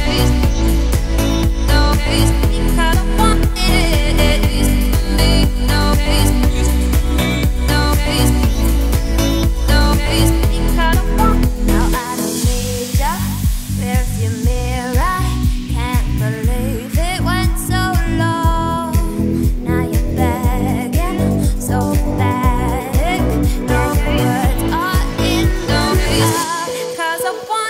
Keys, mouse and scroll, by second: 1.1 `, 2.7-3.3 scroll down 2, 3.3 click, 3.7 shift+click, 3.9-4.3 scroll up 2, 4.3 g, 5.4 click, 6.0 click, 6.2 Tab, 6.5 a, 6.8 `, 7.9-8.3 scroll up 5, 8.3 s, 9.3-9.8 scroll up 6, 9.9 z, 10.4 g, 14.0 z, 14.9 `, 15.4 Tab, 16.1 ctrl+s, 16.6-17.0 scroll up 1, 17.0 shift+middle drag, 17.3-17.7 scroll up 3, 17.7 click, 18.4 ctrl+s, 18.6-19.3 scroll down 4, 19.3-22.3 shift+middle drag, 22.5 click, 23.1 scroll up 2, 23.3 Tab, 23.7-24.2 scroll up 1, 24.2 click, 24.6 alt+click, 25.3-27.1 shift+middle drag, 27.1 click, 27.5 g.